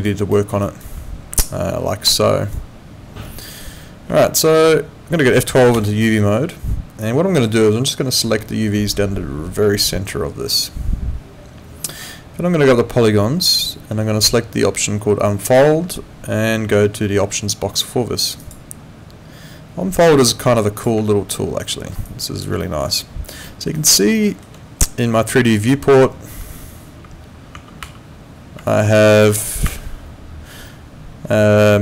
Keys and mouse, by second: 0.3 alt+middle click, 0.6 alt+right click, 1.4 alt+right click, 4.2 alt+middle click, 5.8 F12, 8.1 click, 13.6 click, 18.4 click, 20.0 click, 21.3 alt+middle click, 22.0 alt+click, 22.6 alt+middle click, 22.9 alt+click, 23.5 alt+middle click, 23.8 alt+right click, 24.2 alt+middle click, 28.7 alt+click, 29.7 5.